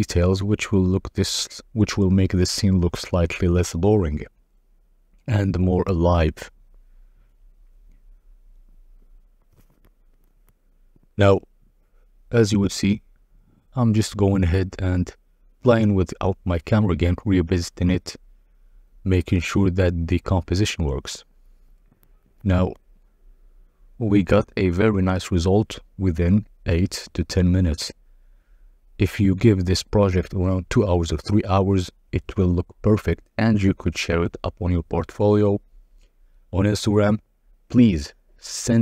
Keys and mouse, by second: 1.0-1.6 drag, 7.2 click, 9.3 click, 10.2 click, 11.3 click, 14.8 click, 16.2-21.7 drag, 22.5 click, 23.4 click, 24.2 g, 24.7 z, 26.8 click, 27.9 g, 28.4 z, 31.9 click, 34.4-36.5 drag, 38.5-38.8 drag.